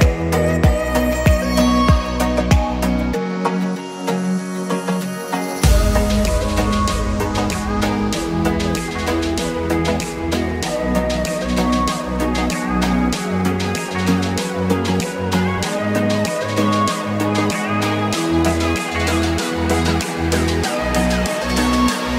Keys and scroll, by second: 7.4 6, 7.6 Return, 8.5 Escape, 10.2 Escape, 13.7 2, 13.8 Return, 14.2 Escape, 15.6 Escape, 21.4 5, 21.5 0, 21.7 Return.